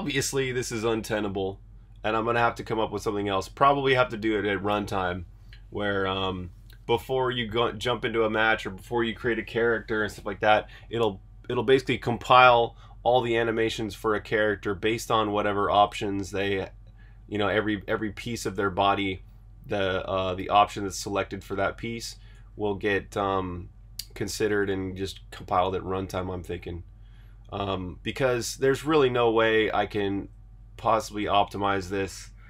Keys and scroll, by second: 28.7 super+Tab.